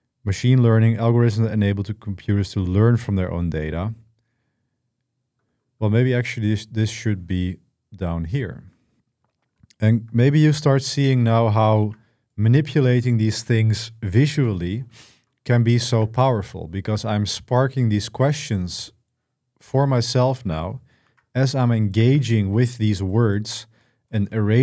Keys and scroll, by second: 10.2 ctrl+x, 11.6 ctrl+v, 20.8 ctrl+x, 21.8 ctrl+v.